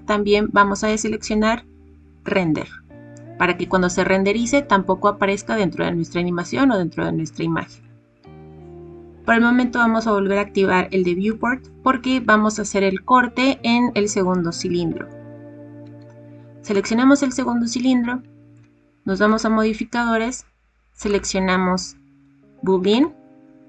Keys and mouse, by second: 2.2 click, 11.3 click, 19.2 click, 21.1-23.0 drag.